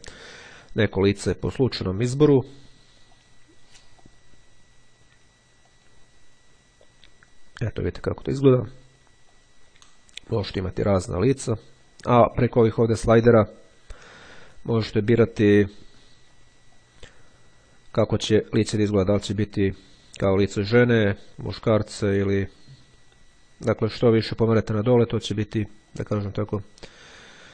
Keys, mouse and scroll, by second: 0.3-1.5 drag, 3.1 click, 4.2 click, 5.1-6.5 drag, 8.9-10.1 drag, 13.4-16.2 drag, 16.9-18.9 drag, 19.1-20.9 drag, 21.3-24.6 drag, 25.8 click.